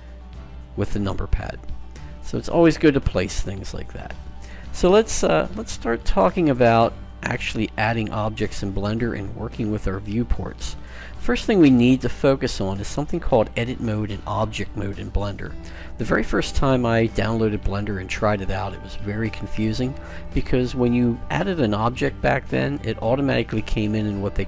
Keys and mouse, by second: 2.3-4.3 middle drag, 6.9-8.9 middle drag, 11.5-14.3 middle drag.